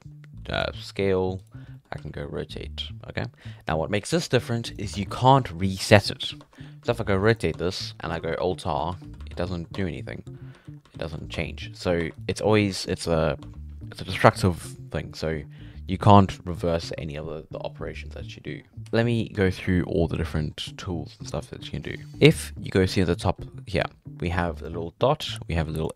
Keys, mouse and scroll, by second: 0.8 s, 1.6 scroll down 1, 1.7 shift+middle click, 2.0 r, 4.9 Tab, 6.4 Tab, 6.8 r, 7.5 Tab, 8.3 alt+r, 8.9 alt+r, 9.2 alt+r, 9.7 Tab, 10.4 alt+r, 10.6 alt+r, 10.8 alt+r, 11.0 alt+r, 11.3 Tab, 11.7 Tab, 12.0 1, 12.2 right click, 13.4 Tab, 18.7 Tab, 18.8 a, 19.5-25.9 shift+middle drag.